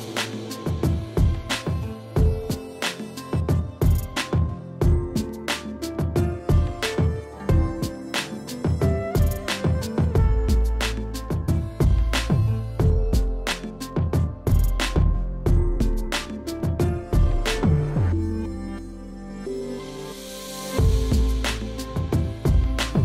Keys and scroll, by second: 8.8 ], 13.2 ctrl+alt+z, 18.0 F9, 19.4 space, 20.0 [.